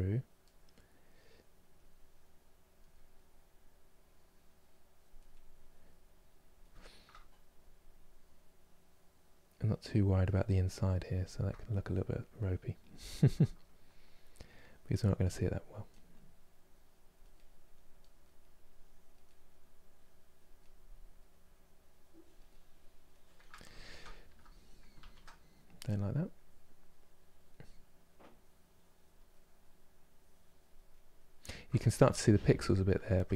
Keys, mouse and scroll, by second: 0.3-1.4 middle drag, 1.4-2.6 drag, 2.6 middle click, 3.5-5.0 drag, 5.0 middle click, 5.7 click, 6.4-7.7 shift+middle drag, 7.7-10.2 drag, 10.2-11.9 middle drag, 11.9 click, 12.8-14.0 shift+middle drag, 14.0-15.1 drag, 15.1-16.2 middle drag, 16.2 click, 17.0-18.3 middle drag, 18.3 click, 18.9 middle click, 19.5 click, 20.2 middle click, 21.2 click, 22.1-24.6 middle drag, 24.6 ctrl+z, 25.0-26.0 middle drag, 26.0-27.3 drag, 27.3 middle click, 28.0-29.0 drag, 29.0 middle click, 29.7 click, 30.6-33.3 middle drag.